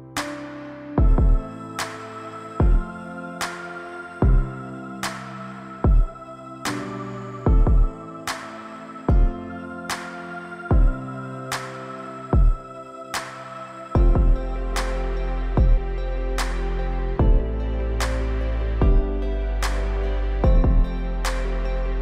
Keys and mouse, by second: 1.1-1.6 middle drag, 4.7 middle click, 5.3-9.9 right drag, 11.7 right click, 13.2 middle click, 13.7 Tab, 14.9-15.2 shift+middle drag, 15.4 middle click, 19.9-22.0 drag.